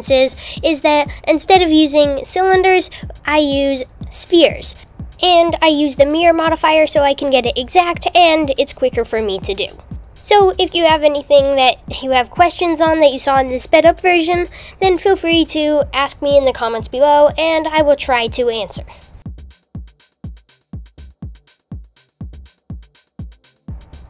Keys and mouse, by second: 0.0-4.9 typing, 0.1 Tab, 0.4 click, 0.6 click, 0.8 click, 3.7 click, 4.2 Tab, 4.3 Tab, 4.7 Tab, 4.7 click, 4.8 click, 5.0 Tab, 5.1 click, 6.0 h, 6.4 Tab, 6.6 super+a, 6.7 alt+h, 6.9 s, 7.0 Tab, 7.1 s, 7.4 super+z, 8.3 KP_1, 8.4 KP_2, 8.4 KP_3, 8.5 g, 9.9-12.9 typing, 10.1 Tab, 11.0 Tab, 13.5 super+r, 14.1 click, 14.2 x, 14.5 click, 14.6 f, 14.9 e, 14.9 super+r, 15.2 Tab, 15.5 h, 15.5 click, 16.4 click, 16.7 super+a, 16.8 x, 16.9 Tab, 17.1 Tab, 17.3 alt+h, 17.5 Tab, 17.6 super+r, 17.9 click, 18.1 x, 18.3 Tab, 18.5 Tab, 19.5 Tab, 19.6 click, 19.7 click, 19.8-22.3 typing, 20.0 Tab, 20.1 Tab, 20.5 click, 20.9 Tab, 21.3 Tab, 21.3 click, 21.6 super+z, 21.7 super+z, 21.9 super+j, 22.1 super+z, 22.1 super+z, 22.6 shift+click, 22.7 super+j, 23.0 Tab, 23.3 l, 23.5 Tab, 23.9 n.